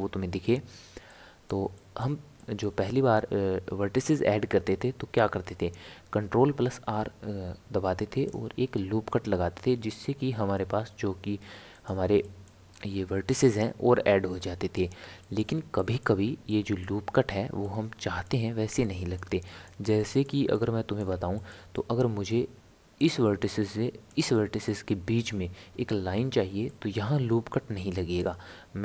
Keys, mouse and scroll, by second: 0.0 n, 1.1-5.4 middle drag, 5.8 ctrl+r, 12.2 middle click, 12.7-13.3 scroll up 2, 13.3-23.0 middle drag, 23.0 click, 24.1 click, 24.7-28.8 middle drag.